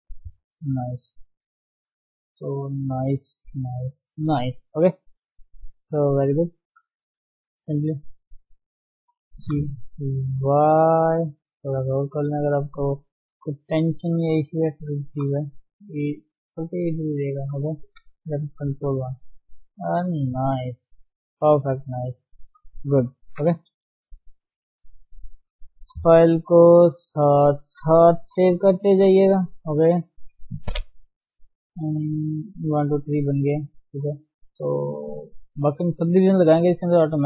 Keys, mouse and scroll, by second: 0.7 scroll down 1, 0.8 Tab, 1.2 ctrl+1, 1.4 scroll down 1, 1.6-2.7 middle drag, 2.7 scroll up 1, 3.0 middle click, 3.4 Tab, 4.2 ctrl+0, 4.6 middle click, 4.8 Tab, 5.0-6.5 middle drag, 6.5 click, 6.7 alt+shift+click, 7.0-7.4 scroll down 2, 7.4 KP_7, 8.0-9.4 scroll up 2, 9.4 g, 11.9 click, 12.2 alt+shift+click, 12.4 scroll down 1, 12.6-13.6 middle drag, 13.6 KP_3, 14.2 scroll up 1, 15.2 g, 16.9 middle click, 17.7 Tab, 19.2 ctrl+1, 19.4 ctrl+scroll down 1, 19.6-21.2 middle drag, 21.8-23.2 scroll down 4, 23.2 ctrl+0, 24.9 ctrl+shift+s, 26.2 ctrl+shift+s, 26.9 ctrl+shift+s, 27.2 ctrl+shift+s, 27.8 ctrl+shift+s, 28.4 KP_1, 28.9 scroll up 1, 29.0-29.4 scroll down 1, 29.4 shift+middle click, 29.5-30.1 scroll up 3, 29.6 Tab, 30.1-31.4 shift+middle drag, 31.4-31.7 scroll down 1, 31.7 shift+middle click, 32.0 scroll up 1, 32.3 shift+z, 32.9 shift+z, 33.6 shift+middle click, 33.9-35.7 scroll up 2, 35.7 shift+z, 36.1-36.6 scroll down 4, 36.6 shift+middle click, 36.8-37.2 scroll up 3.